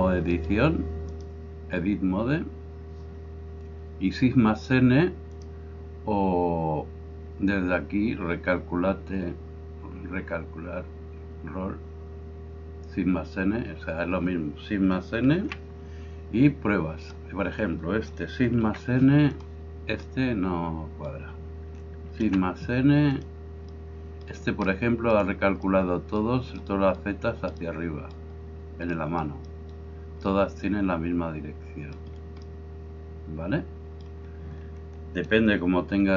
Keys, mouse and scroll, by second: 1.1-36.1 drag, 15.4 shift+n, 18.6 shift+n, 22.2 shift+n.